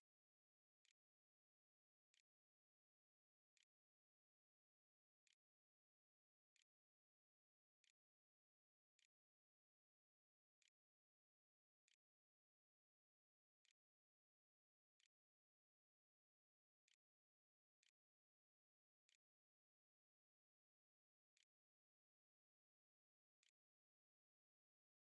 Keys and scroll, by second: 0.0-10.9 typing, 3.2 Tab, 8.4 Tab, 11.3 Return, 12.0 shift+Return, 13.1 shift+', 13.9 ;, 14.7 l, 16.7-21.0 typing, 21.2 End, 22.1 Delete, 22.3-25.0 typing.